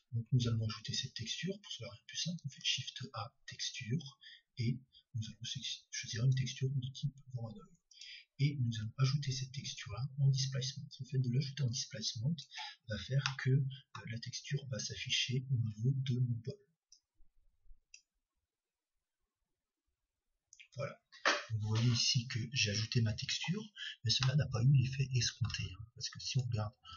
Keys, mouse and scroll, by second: 2.4 shift+a, 10.8-12.4 drag, 13.3-15.5 middle drag, 18.0-19.5 drag, 24.9-26.1 middle drag, 26.5 middle click.